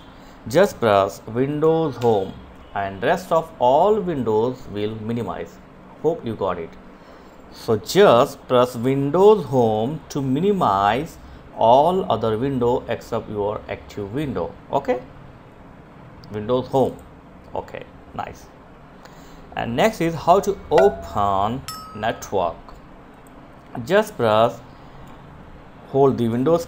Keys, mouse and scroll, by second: 0.8 Home, 15.6 click, 26.6 super+x.